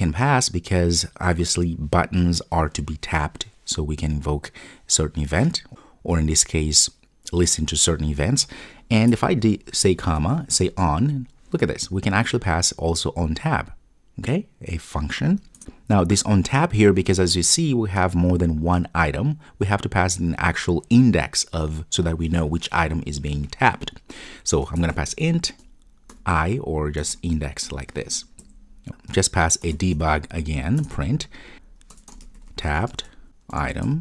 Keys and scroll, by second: 15.5 Return, 30.8 Return.